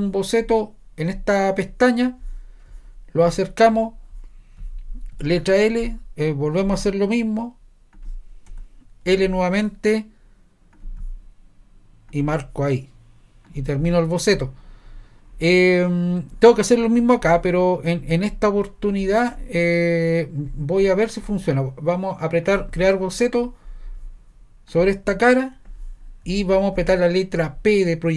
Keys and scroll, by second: 5.2 i, 8.5 Escape, 9.1 i.